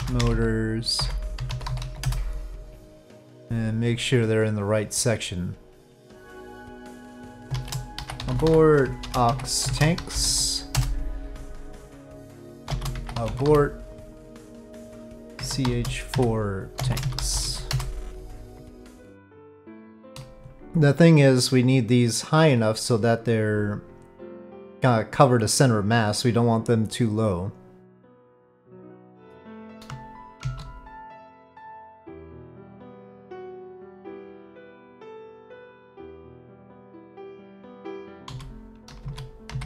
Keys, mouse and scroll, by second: 6.7 click, 7.5-11.4 shift+drag, 11.9-18.3 drag, 18.7 KP_3, 18.7 KP_1, 19.6-20.1 shift+middle drag, 22.7 click, 22.8 click, 23.4 click, 24.7-27.9 drag, 30.4 shift+d, 31.6 click, 34.8 middle click, 38.0 Tab, 38.3 1, 39.0 alt+a, 39.5 c.